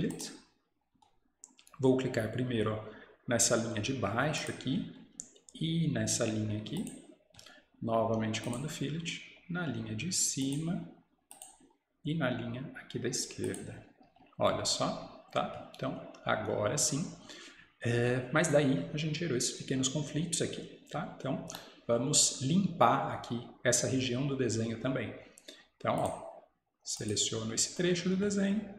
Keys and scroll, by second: 14.9 Escape.